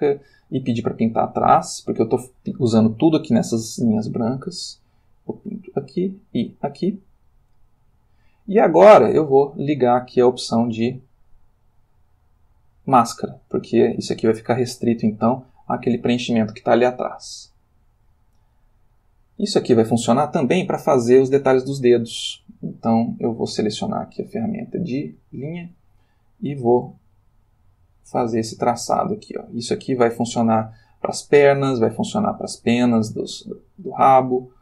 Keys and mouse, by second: 1.6 click, 5.3 click, 6.9 click, 10.6 click, 13.7 click, 14.4-14.9 drag, 16.7-18.3 ctrl+middle drag, 18.6-19.9 ctrl+middle drag, 23.1 click, 23.8 click, 25.0 click, 27.2-28.5 ctrl+middle drag, 29.0-30.6 shift+middle drag, 33.0-34.2 ctrl+middle drag.